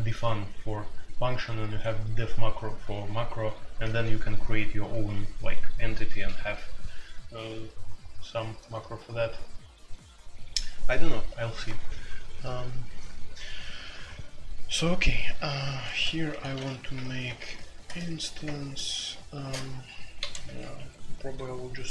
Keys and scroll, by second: 8.2-8.5 typing, 11.4 typing, 12.7-21.2 typing.